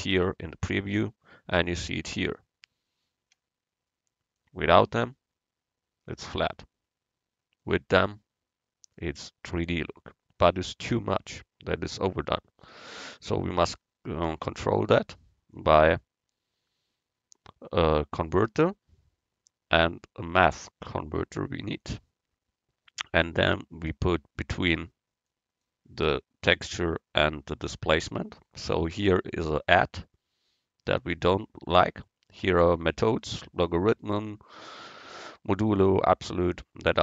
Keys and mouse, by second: 1.3-4.0 middle drag, 4.4-6.4 drag, 7.7-9.6 drag, 15.6-17.5 drag, 31.9-33.8 drag.